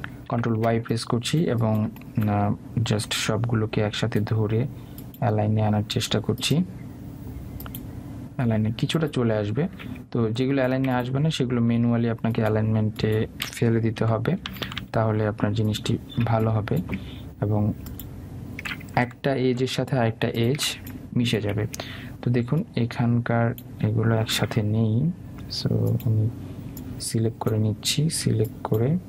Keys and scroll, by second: 15.0 Left, 20.1 Right.